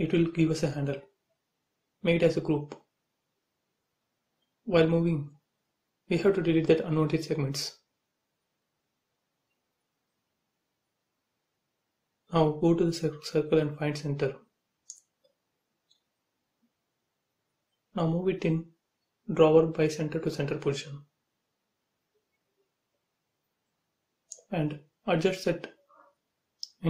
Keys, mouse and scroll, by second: 0.2 right click, 1.2 click, 1.6 scroll down 1, 2.5 click, 3.8 Up, 4.5 click, 4.7 space, 5.3 click, 6.3 Delete, 6.9 middle click, 8.1-9.1 scroll up 1, 9.1 click, 11.7 click, 12.1 space, 12.3-12.9 scroll down 1, 12.9 click, 13.2-13.7 scroll up 1, 14.2 m, 15.0 click, 16.1 Up, 16.4 middle click, 17.1 scroll down 1, 18.3 shift+middle click, 19.4 scroll up 1, 20.7 click, 20.8 space, 21.0 scroll down 1, 21.4 shift+middle click, 22.8 scroll up 1, 24.9 m, 25.7 click, 26.4 space.